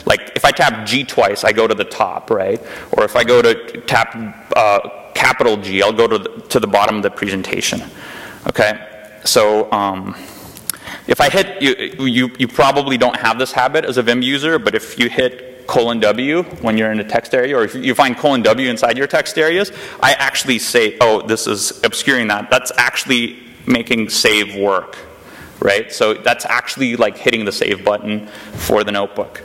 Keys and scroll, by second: 3.1 shift+g, 7.5 BackSpace, 8.6 Right, 11.7 Return, 14.1-17.0 typing, 15.9 Return, 19.0-19.9 typing, 23.2-24.1 typing.